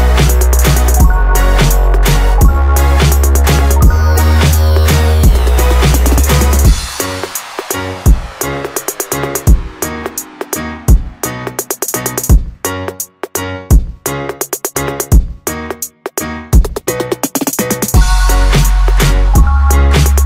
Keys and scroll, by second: 17.9 ctrl+z, 19.3 ctrl+alt+z.